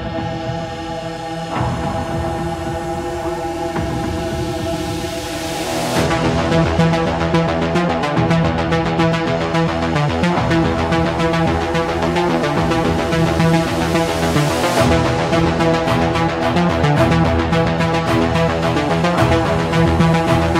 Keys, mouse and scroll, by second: 2.1-3.3 middle drag, 3.9-4.9 middle drag, 6.0 click, 6.9 click, 9.1 click, 12.5 ., 14.1 4, 14.5 Return, 17.0-18.1 middle drag, 19.5-20.5 drag.